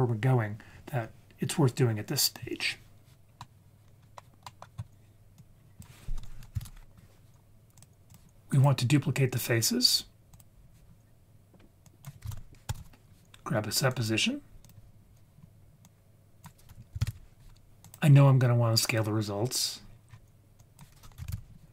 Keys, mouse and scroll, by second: 3.3 scroll down 1, 3.4 middle click, 4.4 middle click, 5.4-6.0 drag, 7.5 click, 8.1-10.4 drag, 11.8-14.1 drag, 14.6 click, 15.8-17.4 drag, 18.9 click, 19.8 scroll down 4, 20.1-20.9 scroll up 3, 20.6-21.7 drag.